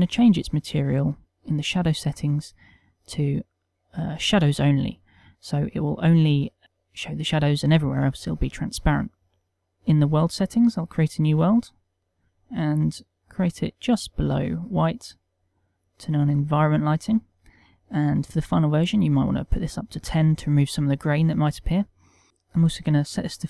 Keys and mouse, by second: 6.5 click, 6.5 middle click.